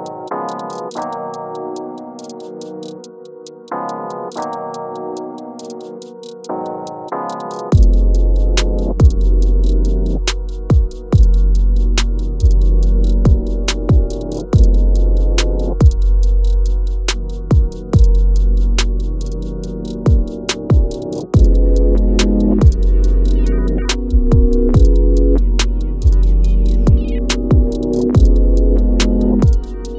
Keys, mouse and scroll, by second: 0.8-3.4 shift+drag, 3.4 scroll up 1, 4.1 scroll down 1, 6.3-11.2 drag, 11.2 space, 13.3 click, 14.7-17.4 shift+drag, 17.4 shift+scroll up 1, 18.0 click, 21.2 click, 24.5 shift+click, 25.2 shift+click, 26.9-28.0 shift+drag, 28.0 scroll down 1, 28.6 click.